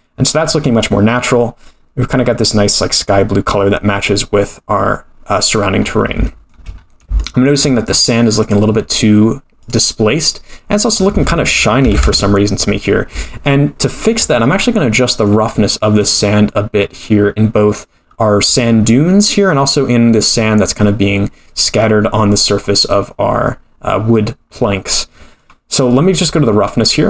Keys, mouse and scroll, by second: 5.8 scroll up 3, 6.3-6.6 shift+middle drag, 6.8 scroll up 2, 7.2 shift+middle drag, 7.9 middle click, 8.4 click, 9.6 click, 10.9-12.7 drag, 14.2-15.0 scroll down 8, 15.0 middle click, 15.5 scroll down 2, 16.0 middle click, 16.8-17.7 scroll up 6, 24.5-26.0 scroll up 6, 25.1 middle click, 26.0-26.3 scroll down 3, 26.4 middle click.